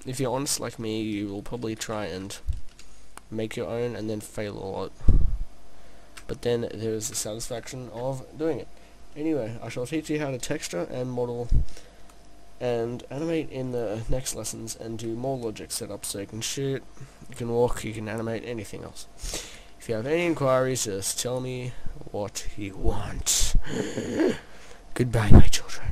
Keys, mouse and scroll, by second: 20.2-20.7 scroll down 1, 20.7 scroll down 6, 20.8 middle click, 23.3-24.9 scroll down 1, 24.9-25.2 scroll down 1.